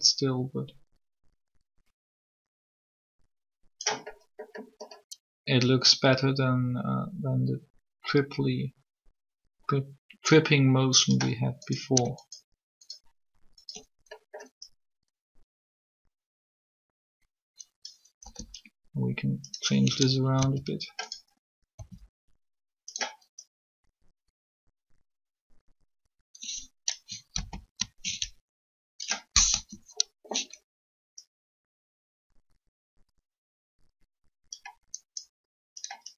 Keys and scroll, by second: 18.2 g, 20.4 s, 21.7 s, 27.4 ctrl+z, 29.5 3.